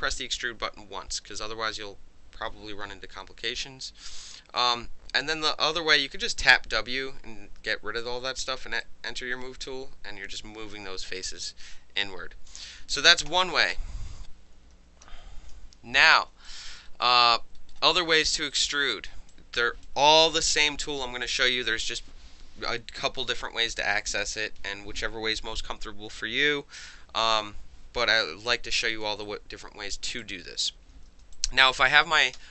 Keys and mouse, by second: 5.5 w, 6.9 w, 8.8-10.7 drag, 11.1-12.5 alt+drag, 13.0 ctrl+z, 13.3 ctrl+z, 13.7 ctrl+z, 15.0 ctrl+y, 16.5 alt+drag, 17.1 alt+click, 17.7 alt+middle click, 18.2 alt+click, 18.5 alt+right drag, 19.3-19.8 alt+drag, 28.5-29.0 alt+drag, 29.2-29.6 alt+right drag, 29.8 alt+middle click, 30.2 alt+click, 31.3-31.8 alt+drag, 32.3 w.